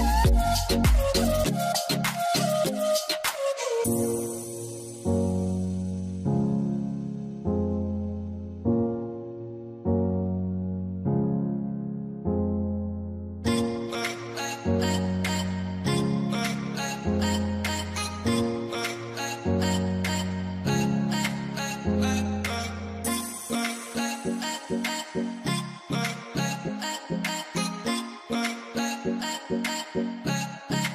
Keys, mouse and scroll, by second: 0.6 typing, 0.9 Return, 4.5 double click, 8.4 0, 13.0 0, 13.1 middle click, 24.0 0, 24.1 Return, 28.0 Return, 30.2 m.